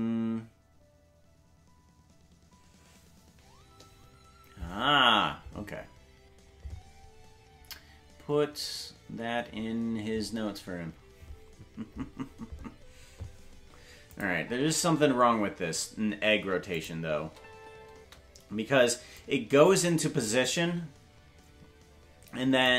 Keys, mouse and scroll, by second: 14.1 click, 14.3 space, 16.7 click, 16.7 space, 17.2 space, 19.1 space, 19.1-22.6 drag.